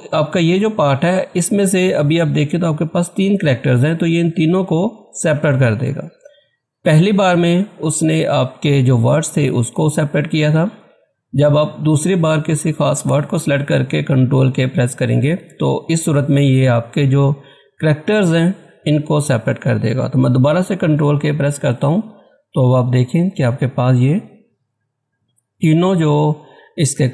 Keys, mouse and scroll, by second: 19.7 ctrl+Caps_Lock, 20.5 ctrl+k, 21.6 click.